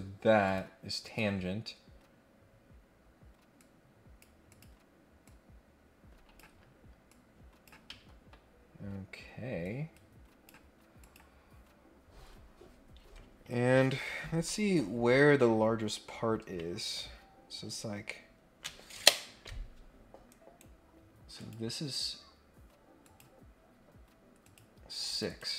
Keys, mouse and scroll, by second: 0.4 click, 1.0 click, 3.5 click, 4.4 click, 5.2-6.4 drag, 7.1 click, 7.9 Escape, 8.3 scroll up 1, 8.5 scroll down 1, 9.6 click, 11.0 click, 20.3 right click, 21.4 click, 23.0 click, 24.4 click, 25.1 click, 25.2 click.